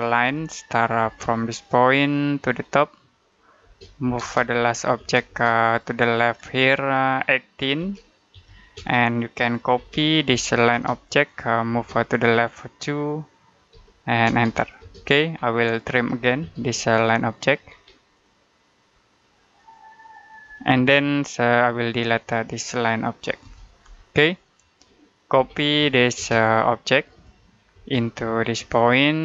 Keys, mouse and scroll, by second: 0.1 l, 0.9 space, 2.3 click, 3.5-4.8 typing, 5.5 click, 7.7-11.6 typing, 10.8 click, 11.7 click, 13.6 2, 14.1 space, 15.3 middle click, 15.6-16.4 typing, 16.7 click, 17.5-18.0 scroll up 1, 18.0 click, 20.6 space, 21.0-21.5 scroll down 1, 21.5 click, 23.3 Delete, 23.8 scroll down 1, 24.2 middle click, 25.2-26.0 typing, 26.4 click, 27.6 space, 27.9 click, 28.3 scroll down 1, 28.4 middle click.